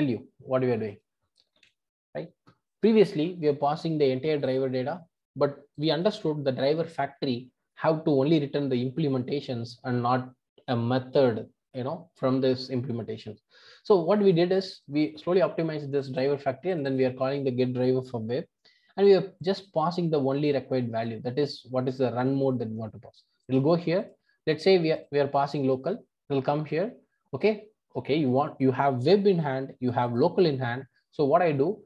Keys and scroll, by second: 1.6 super+BackSpace, 23.8 super+b.